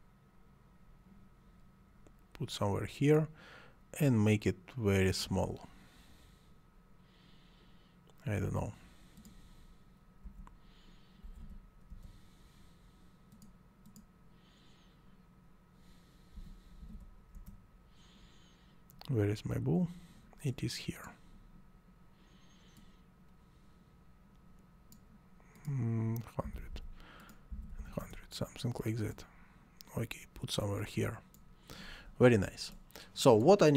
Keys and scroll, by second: 10.2-11.8 typing, 11.9 Return, 16.3 /, 16.9 0, 17.3 Return, 26.2-27.5 typing, 28.0 Return.